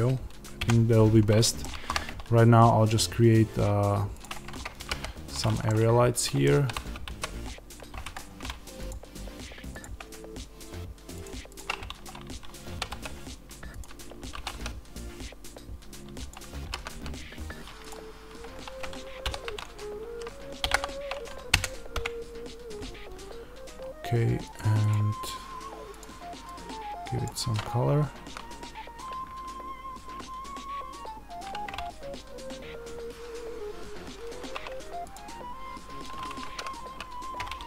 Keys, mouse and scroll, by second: 0.5 KP_Decimal, 1.4 middle click, 1.7 shift+a, 4.7 g, 5.5 click, 5.6 middle click, 6.5 r, 8.1 Escape, 9.6-13.7 drag, 12.1 scroll, 14.3 r, 16.2 click, 16.6 g, 17.8 click, 19.2 r, 26.3 click, 28.3 z, 35.1-36.6 drag, 36.6 ctrl+z.